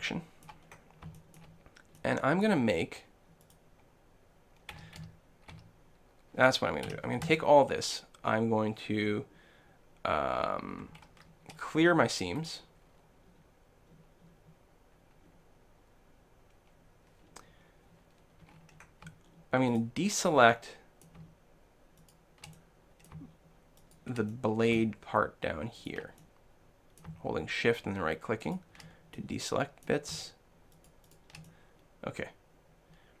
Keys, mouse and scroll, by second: 0.5 click, 0.5 middle click, 1.4-3.8 middle drag, 3.4-5.4 right drag, 4.8 a, 5.0 a, 5.6 a, 6.9 l, 11.0 ctrl+e, 18.4-19.7 middle drag, 19.7-21.0 right drag, 20.5 click, 21.5 shift+click, 22.3 shift+click, 23.8 shift+click, 24.3-25.6 middle drag, 24.8 right click, 25.8-28.2 middle drag, 25.8-27.7 right drag, 28.4-29.6 right drag, 29.2 click, 29.6-30.8 middle drag, 30.8 click, 30.8 right click, 31.5-33.2 middle drag.